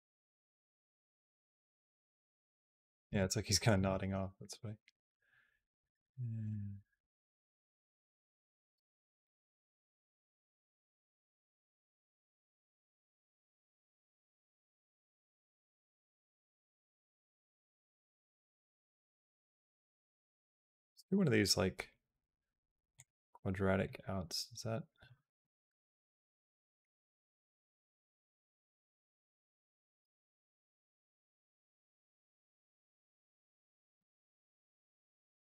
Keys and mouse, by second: 2.9 space, 3.5 click, 3.6 space, 8.6 space, 9.1 click, 9.4-17.6 drag, 18.3 click, 18.5-22.8 right drag, 23.7-24.9 drag, 24.9 space, 26.7 click, 29.7 space, 30.4-31.9 drag, 32.5 click, 32.8 shift+d, 33.8 space, 35.4 click.